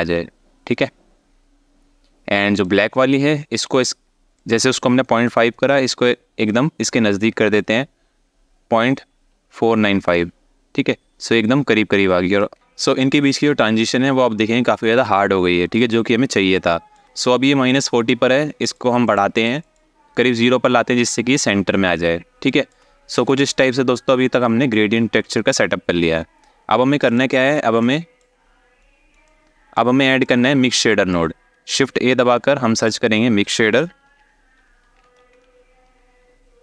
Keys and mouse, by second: 2.3 click, 4.2-9.7 drag, 12.3 alt+shift+middle drag, 16.1 alt+shift+middle click, 18.8 click, 19.1 click, 19.3 click, 22.1 alt+shift+click, 26.7 click, 27.5 shift+middle click, 28.9-29.4 alt+shift+middle drag, 29.9 click, 30.0 click, 31.6 shift+a.